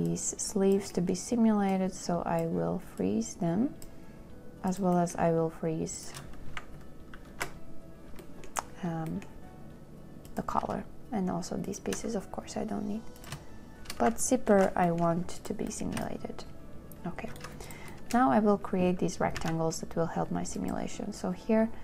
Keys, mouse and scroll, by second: 0.3 shift+click, 1.1 scroll, 2.8 scroll, 3.3 click, 3.5 scroll, 4.4 scroll, 7.6 ctrl+k, 11.9 shift+click, 14.8 ctrl+k, 16.5 shift+click, 19.6 z.